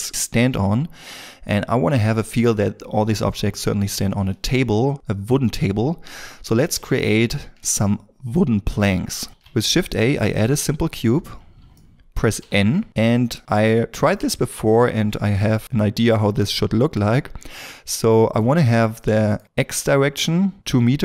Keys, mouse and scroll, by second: 6.3-6.8 scroll down 1, 6.8 shift+middle click, 9.3 shift+a, 10.8 scroll down 1, 11.7 shift+middle click, 11.9 middle click, 12.3 n, 19.0 middle click.